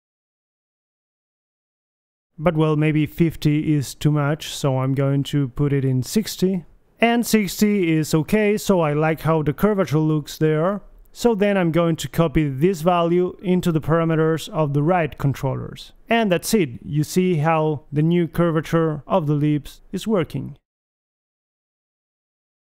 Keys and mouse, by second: 0.1-1.2 right drag, 1.2 click, 2.5-6.5 drag, 6.8-8.3 drag, 8.3-9.4 middle drag, 13.4 middle click, 13.7 KP_1, 14.1-15.8 drag, 16.0 ctrl+c, 17.7 ctrl+v, 18.1 ctrl+v, 18.7 click, 19.0 g, 19.4 click, 19.4 g, 22.5 middle click.